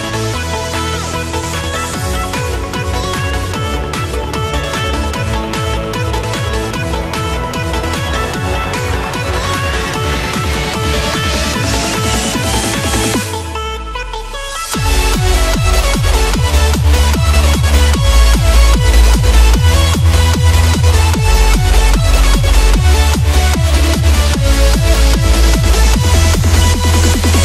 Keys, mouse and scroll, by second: 2.3 Up, 4.9-6.3 drag, 7.7 ctrl+-, 8.0 space, 8.1 click, 8.3 space, 8.8-9.5 click, 9.6 right click, 11.0 click, 11.6 ctrl+-, 11.9 space, 12.0-12.4 click, 12.4 space, 12.8 click, 13.3-14.6 alt+drag, 15.2-15.7 space, 16.0 click, 18.7 right click, 20.4 click, 20.7-21.1 space, 21.6 click, 22.4-24.2 alt+drag, 26.5-27.1 click.